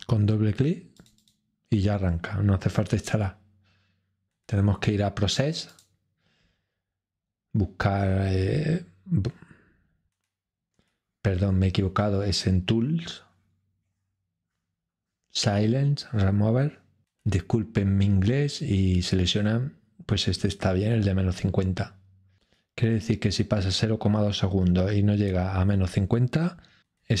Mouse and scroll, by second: 0.9 click, 5.7-6.7 drag.